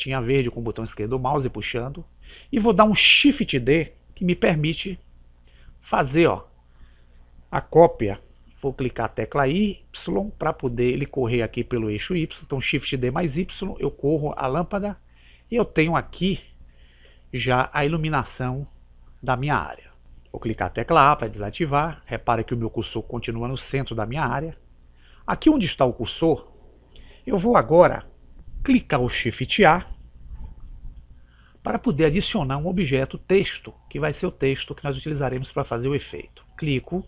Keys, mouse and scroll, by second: 5.0 shift+d, 20.9 a, 30.4 shift+a.